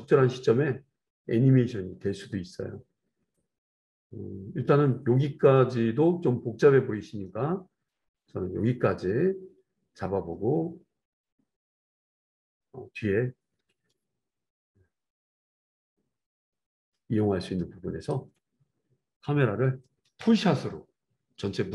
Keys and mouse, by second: 0.3-3.4 drag, 3.4-5.1 right drag, 5.1-12.7 drag, 15.5-21.7 drag, 21.1 ctrl+s.